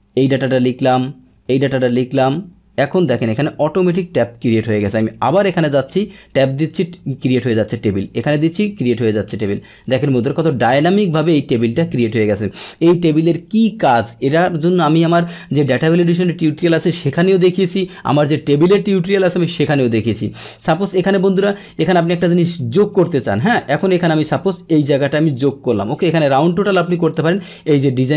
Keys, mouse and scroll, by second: 0.8 Tab, 3.0 Tab, 4.7 Tab, 6.4 Tab, 6.7 Tab, 7.9 Tab, 9.7 Tab, 10.5 Tab, 22.6 click, 25.3 click, 27.1 click.